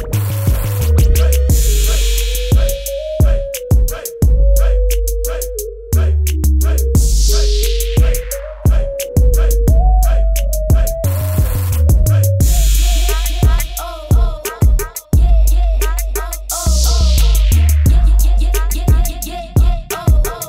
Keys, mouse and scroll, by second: 3.9 space, 4.1 click, 4.4 space, 4.5 click, 9.1 shift+click, 11.7 click, 17.2 =, 17.3 space, 17.4 click, 17.5 space, 18.3 shift+click, 18.6 z, 18.7 click.